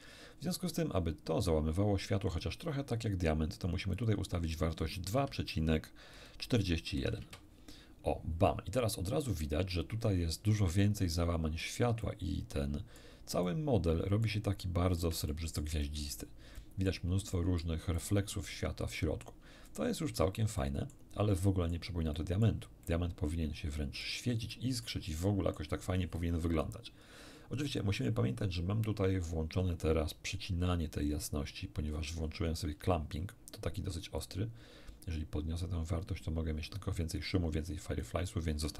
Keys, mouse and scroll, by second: 0.6 click, 3.9 click, 5.2 2, 6.9 ., 6.9 4, 7.2 Return, 7.2 1, 10.7-11.8 middle drag, 12.0-13.2 middle drag, 13.4-14.4 middle drag, 14.6 middle click, 15.3 shift+middle click, 16.6 shift+middle click, 17.3 shift+middle click, 18.0 shift+middle click, 19.0 shift+middle click, 19.6 shift+middle click, 20.6 shift+middle click, 21.4 shift+middle click, 22.2 shift+middle click, 22.8-24.2 shift+middle drag, 24.5 middle click, 25.2 shift+middle click, 31.9 middle click, 34.2-38.5 drag.